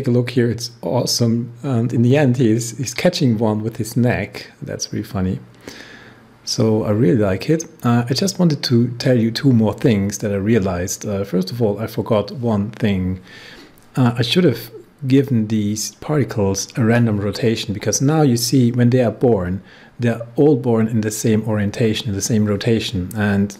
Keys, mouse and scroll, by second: 15.2-19.5 drag, 23.5 click.